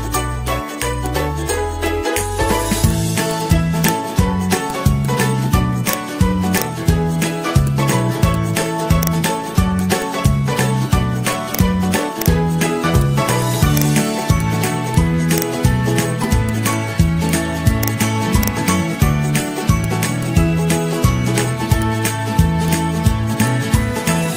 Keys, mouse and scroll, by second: 0.7 Pause, 0.7 ctrl+z, 1.3 Pause, 1.4 ctrl+-, 4.4 ctrl+c, 4.5 ctrl+c, 7.3 ctrl+v, 9.6 ctrl+c, 12.7 ctrl+v, 15.9 ctrl+c, 19.0 ctrl+v, 20.7 g, 21.2 ctrl+-, 21.3 ctrl+-.